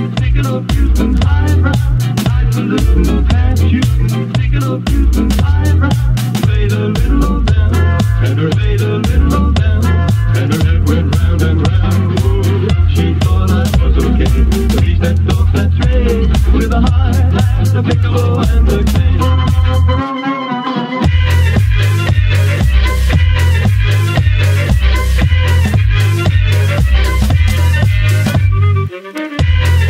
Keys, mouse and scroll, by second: 0.0 click, 0.4-1.6 scroll up 3, 1.6 space, 2.2 click, 2.7 space, 2.9 space, 3.6 space, 4.3 click, 6.8 click, 7.1 `, 7.5 scroll up 4, 7.7 click, 8.2 scroll down 3, 9.8 click, 10.2 click, 11.3 click, 13.6-17.2 drag, 17.2 shift+a, 17.5 g, 18.9 click, 19.2 `, 19.5 scroll down 6, 19.7-20.7 scroll up 1, 20.7 g, 23.5 KP_0, 25.6 click, 26.1-27.4 drag, 27.4-28.2 scroll down 4, 28.2 scroll down 1, 28.3 g, 29.5 shift+d.